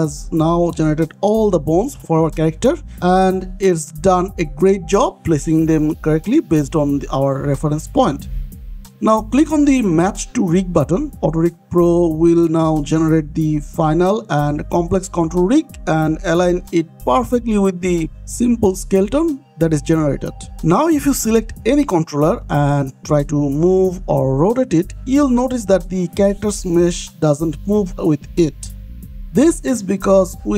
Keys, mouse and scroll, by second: 0.0-0.6 scroll down 2, 0.6 middle click, 1.1 scroll up 1, 1.5 shift+middle click, 2.0 middle click, 2.8 middle click, 3.1 shift+middle click, 3.5 middle click, 3.8 middle click, 5.9-6.4 scroll down 1, 6.4 middle click, 7.9 middle click, 9.4 click, 13.2 middle click, 19.1 middle click, 21.3 click, 23.1 r, 28.5 Escape.